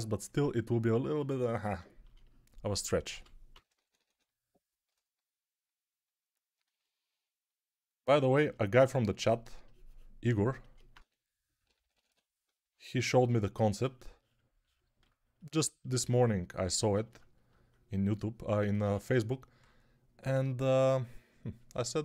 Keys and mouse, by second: 3.0-4.0 typing, 10.8-11.9 typing.